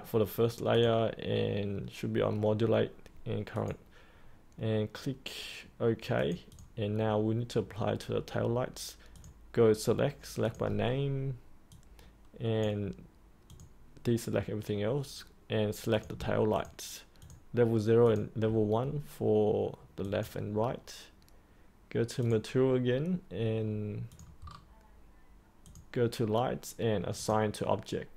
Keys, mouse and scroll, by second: 16.5 ctrl+click, 17.1 ctrl+click, 18.0 ctrl+click, 20.0 click, 24.4-25.5 scroll down 1, 25.5 click.